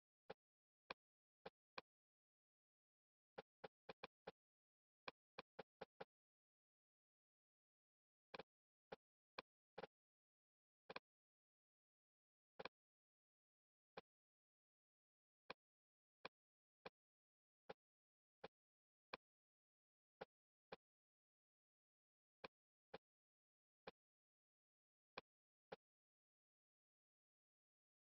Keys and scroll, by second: 26.8 Escape.